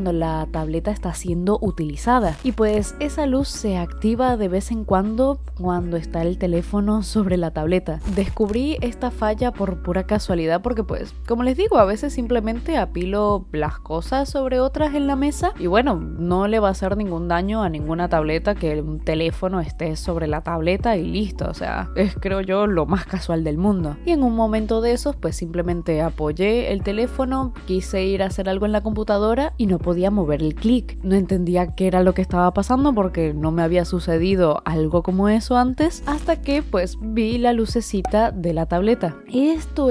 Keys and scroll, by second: 0.0 ctrl+z, 0.1 [, 1.3 ], 1.7 ], 10.1 i, 10.7 i, 12.1-17.6 typing, 21.9 i, 22.2 i, 23.6-25.1 typing, 25.4 ctrl+z, 27.2 ctrl+z, 27.8 i, 28.8 i, 29.0 i, 29.5 i, 30.7-35.8 typing.